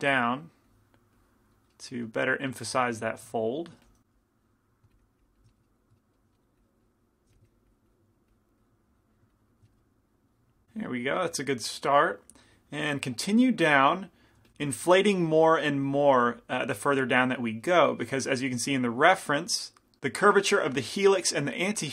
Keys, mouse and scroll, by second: 0.1-3.5 drag, 2.7-4.9 middle drag, 3.9 f, 4.2-6.2 drag, 5.6-7.2 middle drag, 6.7-10.5 drag, 7.4 f, 9.7-12.8 middle drag, 12.2-14.5 drag, 14.5 f, 14.7 f, 15.0 middle click, 15.6-19.1 drag, 19.1 middle click.